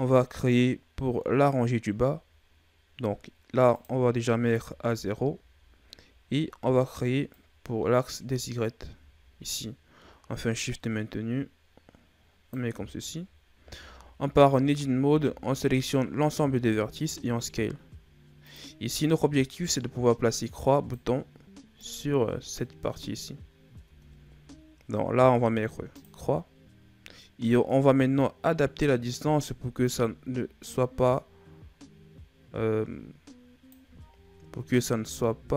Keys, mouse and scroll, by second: 3.6 click, 7.2 click, 13.5 Tab, 14.5 a, 15.0 a, 16.4 s, 19.4-23.8 drag, 23.8 Tab, 25.8 click, 29.7 shift+click, 34.9 Tab.